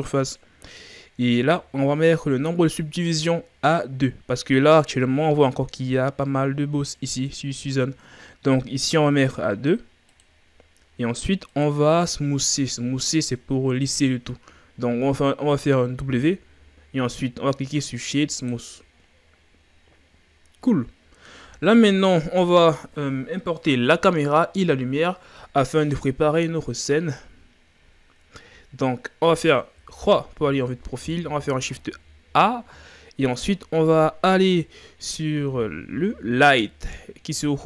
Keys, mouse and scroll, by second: 1.3-1.8 ctrl+scroll down 3, 1.8-2.5 shift+scroll up 6, 10.2-14.6 drag, 16.0 w, 29.8 KP_3, 31.5 shift+a.